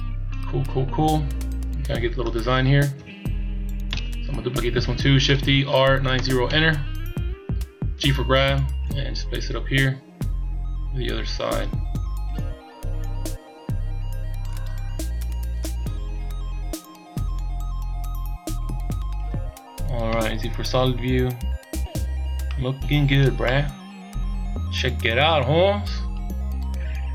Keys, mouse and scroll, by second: 3.0 KP_7, 3.9 z, 5.4 shift+d, 8.0 g, 15.7 click, 20.0 z, 22.2 scroll down 2, 22.5 middle click, 23.5 middle click, 26.7-27.0 shift+scroll down 5.